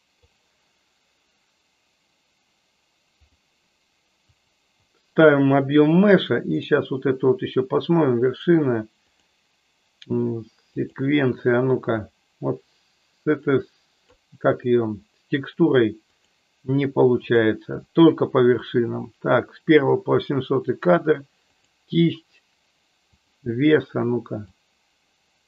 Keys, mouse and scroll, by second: 3.4-4.6 drag, 6.6 click, 9.2-11.0 drag, 12.0-14.3 drag, 16.3-17.4 drag, 21.4-23.4 drag, 24.5-25.4 drag.